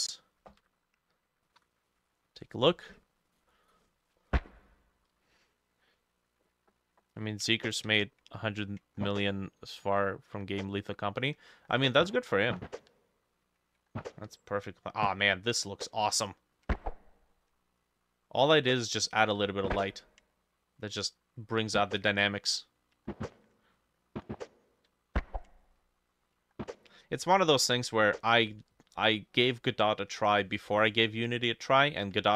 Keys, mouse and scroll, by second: 0.3 middle click, 0.7 scroll up 1, 1.6 F6.